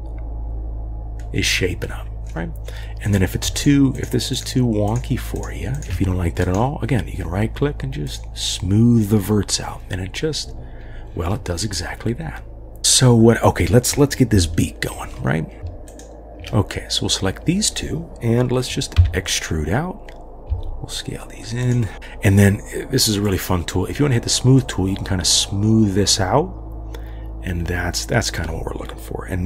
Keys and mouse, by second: 3.0 click, 3.6 shift+click, 3.9 shift+click, 4.4 shift+click, 4.9 shift+click, 5.8 shift+click, 6.5-8.2 drag, 11.7-12.8 drag, 11.7-12.8 right drag, 14.6 shift+click, 19.0 e, 20.5 s, 23.3 click, 24.7-28.0 drag.